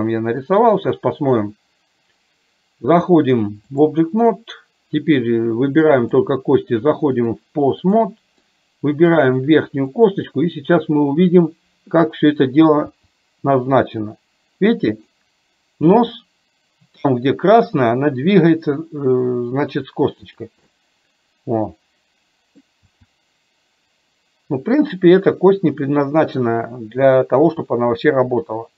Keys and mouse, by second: 0.5-4.1 drag, 7.2-8.2 drag, 8.5 middle click, 10.1 click, 20.7-22.7 middle drag.